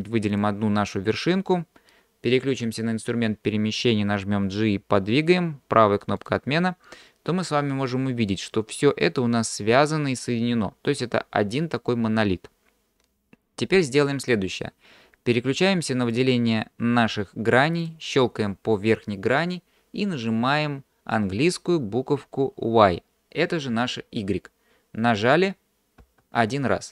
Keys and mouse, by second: 4.4 g, 9.1 click, 16.1 click, 17.9 click, 26.0 y.